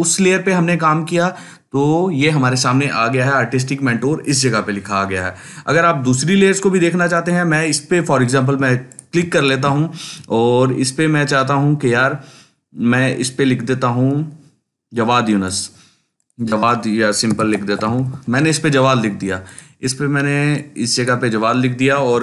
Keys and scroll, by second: 17.0-18.5 typing.